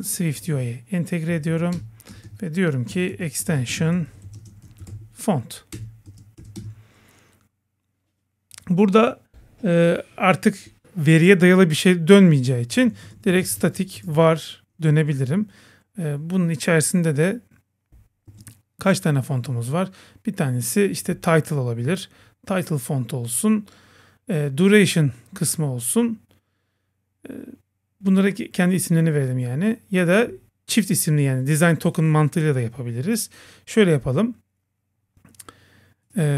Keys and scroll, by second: 1.4 Down, 1.8 Return, 2.5 Return, 5.8 Return.